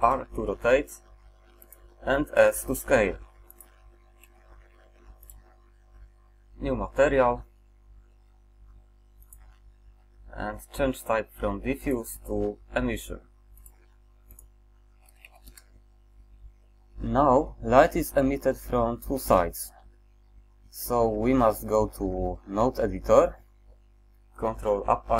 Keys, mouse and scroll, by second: 0.1 r, 2.4 s, 4.3 g.